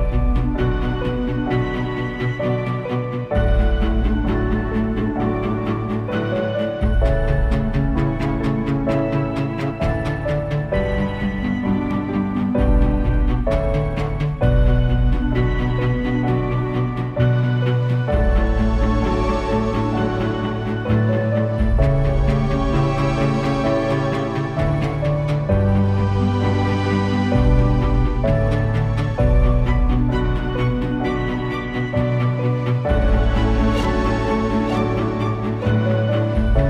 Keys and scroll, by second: 0.2 super+space, 0.5 super+space, 1.9 space, 2.5 super+space, 6.0 space, 6.4 space, 6.4 super+z, 6.7 space, 7.3 space, 7.9 super+z, 9.0 space, 9.5 super+space, 9.8 super+space, 12.8 space, 13.1 space, 14.1 super+z, 14.3 space, 19.1 space, 19.9 space, 20.5 space, 21.0 super+space, 21.3 super+space, 22.8 space, 23.0 space, 28.3 space, 28.9 space, 31.4-33.1 typing.